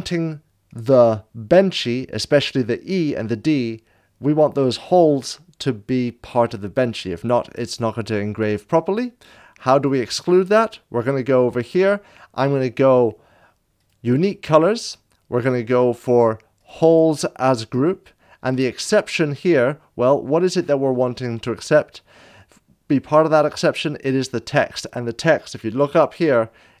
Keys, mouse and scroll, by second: 0.7 click, 9.7 click, 13.8 click, 16.6 click, 18.8 click.